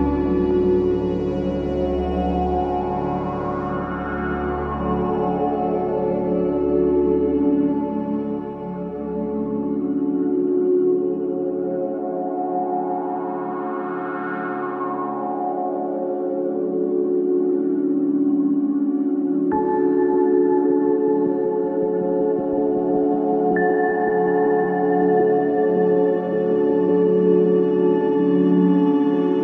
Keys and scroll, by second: 7.9 ], 16.5 4, 19.3-19.9 typing, 19.9 Return, 24.2 2, 27.1 F1, 27.5 F2.